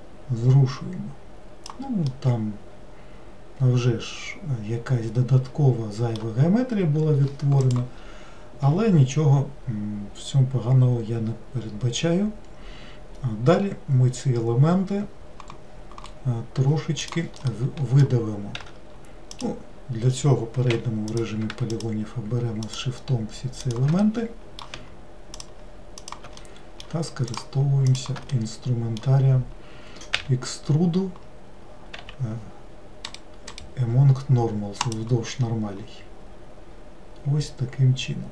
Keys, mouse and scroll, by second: 2.1-5.1 middle drag, 17.5-18.6 middle drag, 18.6 w, 19.4 click, 20.7 3, 21.2 click, 21.7 shift+click, 22.7 shift+click, 23.7 shift+click, 24.1-25.4 middle drag, 25.4 shift+click, 26.0 shift+click, 26.5 middle click, 27.4 shift+click, 27.9 shift+click, 28.4-30.2 middle drag, 30.2 e, 35.0-36.6 right drag.